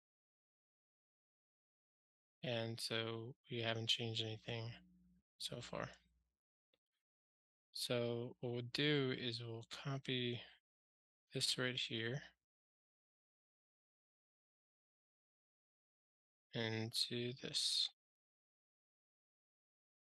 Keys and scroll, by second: 14.3 super+c, 18.7 super+v.